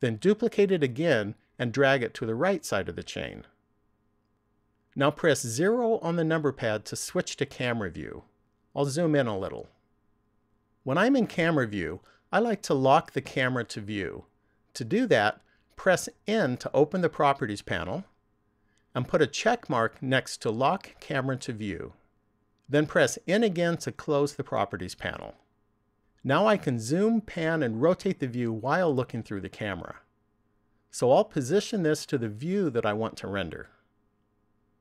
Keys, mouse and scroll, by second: 0.6 shift+d, 4.0 click, 5.7 KP_0, 8.3-8.9 scroll up 2, 16.6 n, 19.3 click, 22.5 n, 30.3-30.7 scroll down 1, 34.0 middle click.